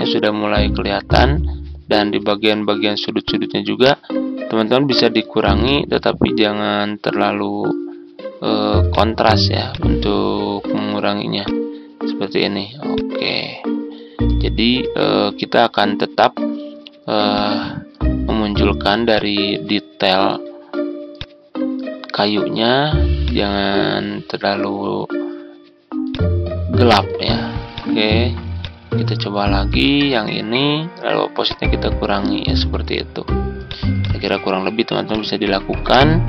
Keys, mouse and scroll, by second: 3.2-14.3 drag, 14.4-17.3 ctrl+scroll down 1, 17.3-33.4 drag.